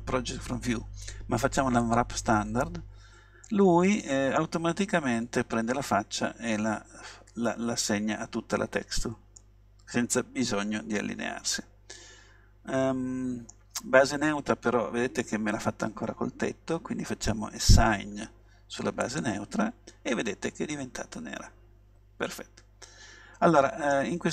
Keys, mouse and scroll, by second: 3.5-5.4 middle drag, 9.5-11.4 middle drag, 12.1-13.4 middle drag, 19.1-20.3 drag, 20.3 middle click, 20.7 click, 20.9-22.2 middle drag.